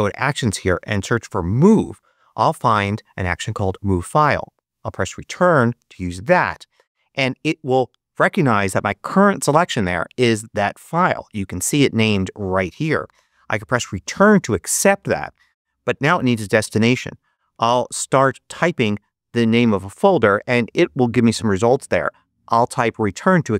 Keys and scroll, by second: 0.4-1.7 typing, 4.8 Return, 14.0 Return, 17.3-18.3 typing.